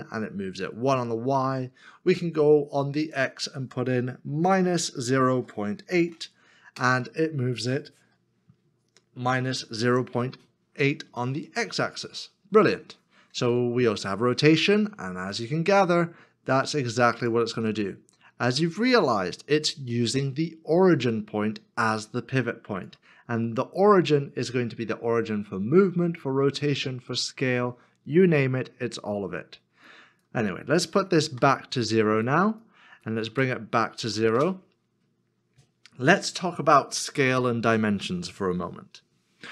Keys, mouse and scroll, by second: 4.4 Return, 5.0-5.8 typing, 6.8 Return, 8.2 middle click, 10.3 shift+middle click, 11.7 middle click, 23.5 middle click, 31.3 middle click, 31.4 KP_0, 34.3 Return.